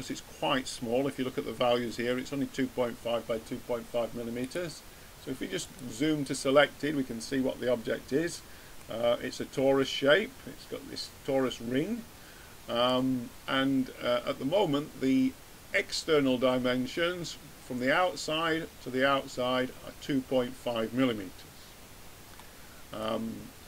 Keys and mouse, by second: 7.4-8.7 middle drag, 10.3 middle drag.